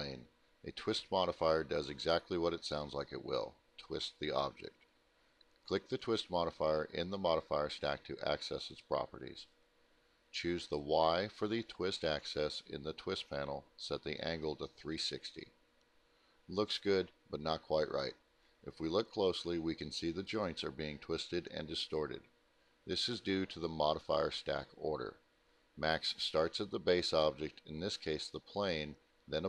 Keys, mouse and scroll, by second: 7.6 click, 10.2 click, 13.3-14.0 typing, 15.2 middle click, 15.2-15.9 scroll up 2, 15.4 middle click, 15.7 middle click, 16.2 middle click, 18.0 middle click, 18.8 alt+middle click, 22.8 click, 23.9 click, 25.2 click, 26.3 click, 28.3 click.